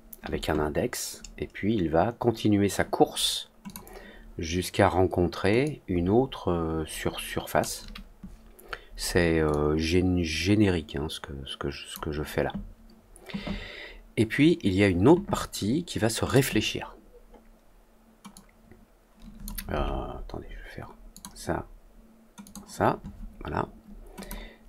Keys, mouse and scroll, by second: 3.6 click, 5.6-7.5 drag, 9.4-11.8 drag, 16.2 click, 18.3-19.4 drag, 21.0 click, 22.4 click, 24.1 click.